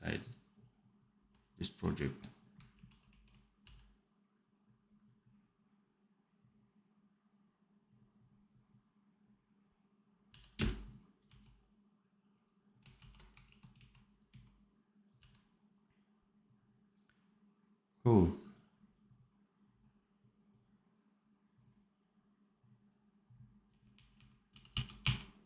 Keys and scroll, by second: 2.6 shift+q, 2.9 shift+a, 3.5 v, 10.2 v, 10.5 space, 11.2 x, 12.9 ctrl+z, 13.4 shift+q, 13.6 shift+a, 14.2 x, 15.1 v, 23.2 r, 24.1 r, 24.4 f, 24.9 r.